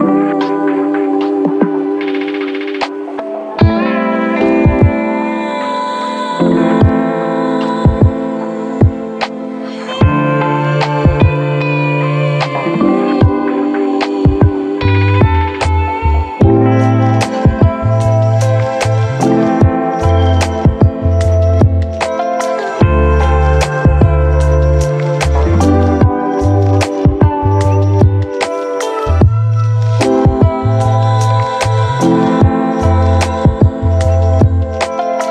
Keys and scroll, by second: 4.0 ctrl+d, 5.3 Delete, 13.3 ctrl+1, 13.6 ctrl+1, 18.0 Delete, 18.9 1, 24.7-27.3 typing, 30.9 v, 33.8 f.